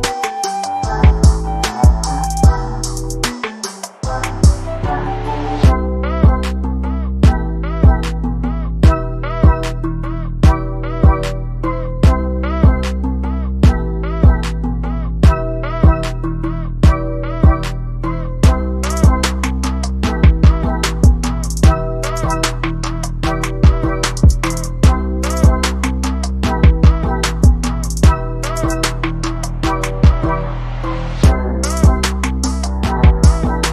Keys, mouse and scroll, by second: 0.2 middle click, 0.5 KP_1, 1.9 ctrl+a, 2.8 click, 3.2-3.7 drag, 4.1-5.0 drag, 5.0 middle drag, 5.2 Tab, 5.5 Tab, 5.9 click, 17.6 click, 19.6 click, 20.0 middle click, 20.5 shift+middle click, 21.0 ctrl+Tab, 22.2 click, 22.9 ctrl+a, 24.4 middle click, 24.5 z, 25.8 click.